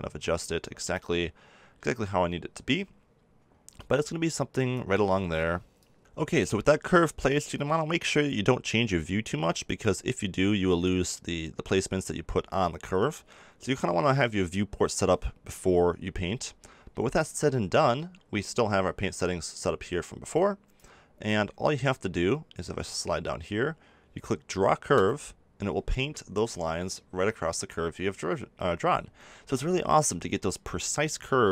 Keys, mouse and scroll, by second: 3.7-5.4 drag, 8.5 middle click, 11.6-20.3 middle drag, 20.3-31.3 drag, 31.3 ctrl+z.